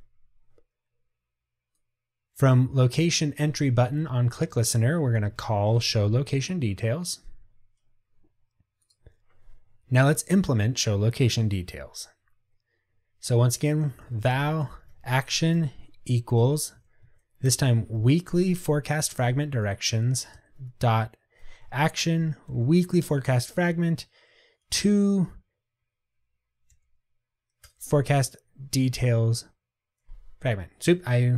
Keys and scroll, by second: 6.3 Tab, 19.3 Return, 27.9 Return.